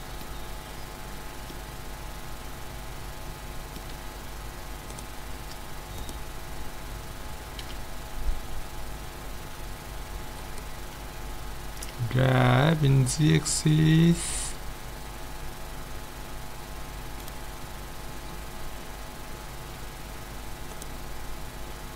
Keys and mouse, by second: 4.1 z, 4.9-7.7 right drag, 7.6 KP_1, 7.8 middle click, 11.2-12.9 middle drag, 11.8 g, 17.6-21.0 middle drag, 21.0-21.9 right drag.